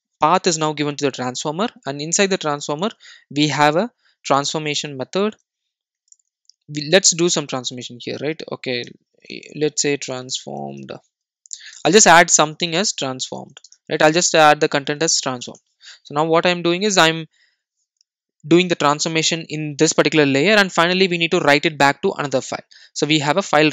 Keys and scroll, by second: 3.0 super+b, 15.2 super+s, 15.3 super+e.